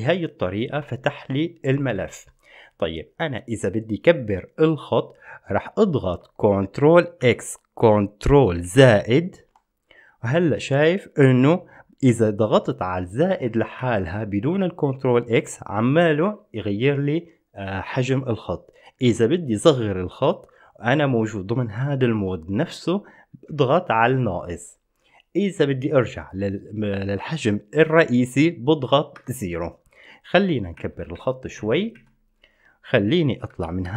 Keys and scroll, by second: 7.4 ctrl+x, 8.8 ctrl++, 13.9 typing, 16.4 typing, 29.1-29.9 typing, 31.0-31.8 typing, 33.7 Escape, 33.7 typing.